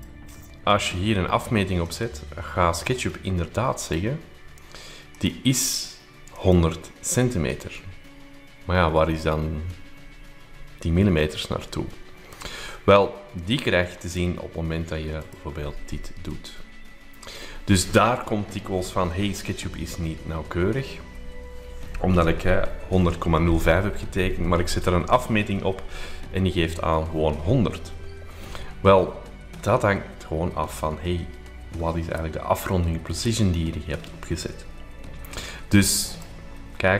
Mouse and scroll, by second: 1.9 click, 3.8 click, 5.1 click, 6.3 click, 6.5 click, 14.1 click, 15.3 click, 16.0-36.1 drag, 36.2 click.